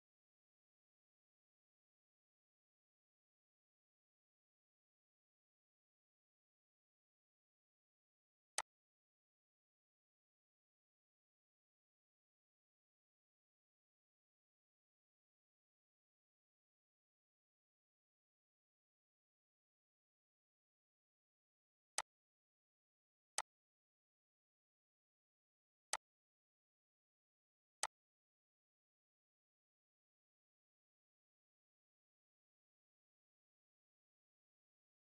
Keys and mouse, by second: 8.2-11.6 drag, 21.6 click, 25.5 click.